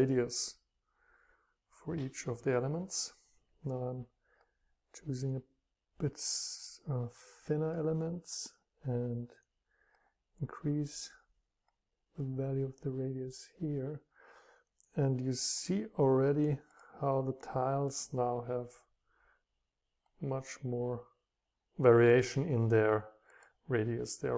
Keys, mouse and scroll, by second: 0.1-2.0 drag, 4.6 click, 4.9-7.6 scroll down 3, 7.6-8.5 scroll down 1, 8.5-9.3 scroll down 1, 10.2-12.7 middle drag, 10.2-11.7 scroll up 2, 11.7-12.7 scroll up 1, 20.1-22.9 middle drag, 22.9 click, 22.9-23.9 scroll up 2, 23.9-24.2 scroll up 1.